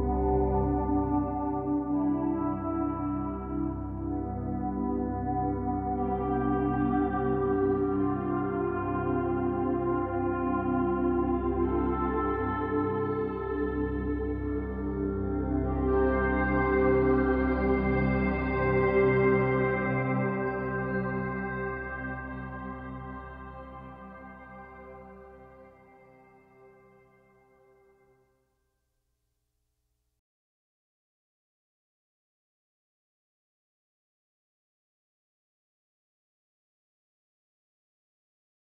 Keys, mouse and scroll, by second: 1.0-4.1 drag, 7.2-10.3 drag, 12.0-14.8 drag, 15.9-19.0 drag, 25.1 click, 37.2 Tab.